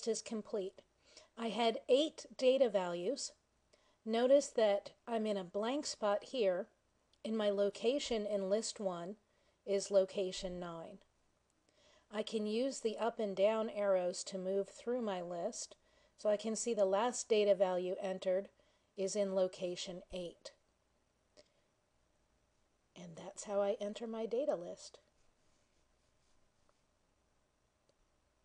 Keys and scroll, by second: 13.6 ^.